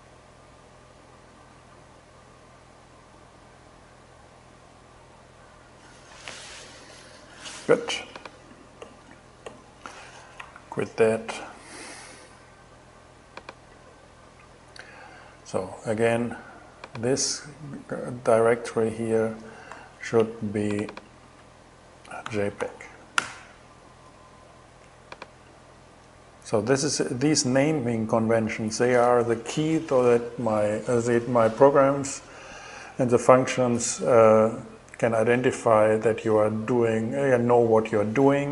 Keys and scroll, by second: 10.1 super+q, 19.3 super+i, 21.6-22.7 typing, 22.7 Return.